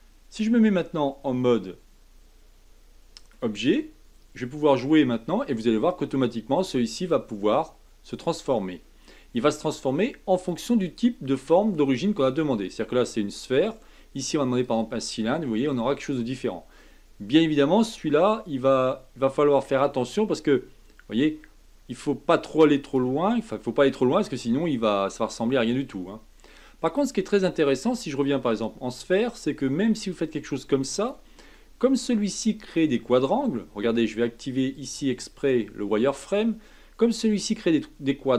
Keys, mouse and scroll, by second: 0.5 Tab, 1.2-4.2 middle drag, 4.6-7.6 drag, 10.3-13.5 drag, 15.5-17.6 middle drag, 17.6-20.6 drag, 25.3-31.5 drag, 31.5-34.5 middle drag, 34.7-36.8 drag, 36.8-38.3 middle drag.